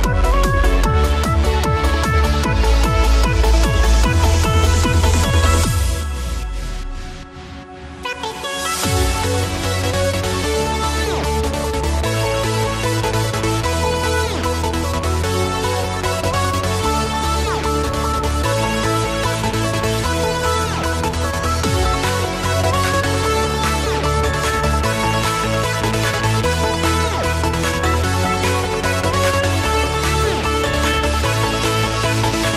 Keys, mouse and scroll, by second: 0.2-0.6 drag, 2.2 Up, 3.3 Down, 5.5 click, 6.9 Down, 9.2-11.0 drag, 11.7-12.2 alt+shift+click, 12.4 Down, 13.0 Left, 13.5 Down, 13.9 Right, 14.4 click, 17.1 Up, 17.3 Right, 17.5 Up, 17.9 Right, 18.4-19.4 drag, 21.3 click, 21.5 Up, 23.9-24.6 drag, 28.9 Up, 32.1 click.